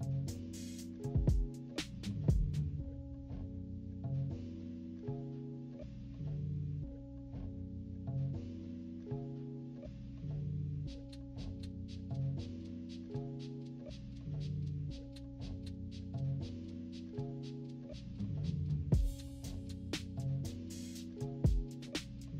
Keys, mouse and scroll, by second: 0.0-0.6 typing, 0.4 scroll down 2, 3.3-6.1 drag, 7.0 click, 7.2 click, 7.5 click, 7.8 click, 8.3 click, 8.7 click, 9.2 -, 9.6 =, 9.7 scroll up 2, 10.0 =, 10.4 click, 10.7 click, 10.9 click, 11.2 click, 11.5 click, 11.9 click, 12.3 click, 12.5 click, 12.6 -, 13.0 =, 13.4 click, 13.6 click, 14.2 click, 14.5-15.7 drag, 15.8 click, 16.1 click, 16.5-19.8 drag, 20.1 -, 20.6 =, 20.9-21.4 scroll down 2, 21.2 -, 21.7 -.